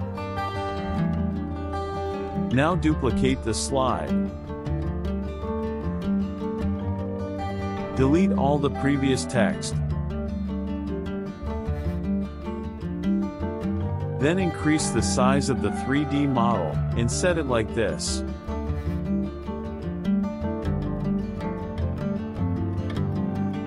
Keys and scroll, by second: 2.3 KP_Add, 4.8 KP_Subtract, 7.8 BackSpace, 9.8 Num_Lock, 10.3 BackSpace, 11.6 BackSpace.